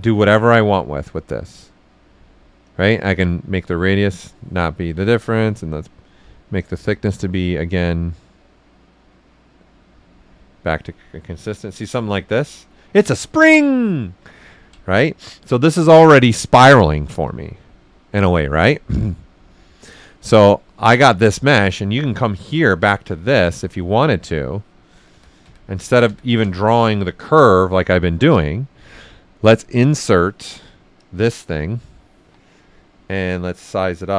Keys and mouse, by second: 0.5-2.6 right drag, 2.6-5.2 drag, 2.6 typing, 5.2-8.1 drag, 8.1-11.0 drag, 11.0 right click, 16.9-21.9 drag, 20.3 typing, 21.9 right click, 24.2 click, 24.9 ctrl+z, 27.2 alt+right click, 28.1-29.4 drag, 32.2 w, 32.5 right click, 33.2-34.1 drag.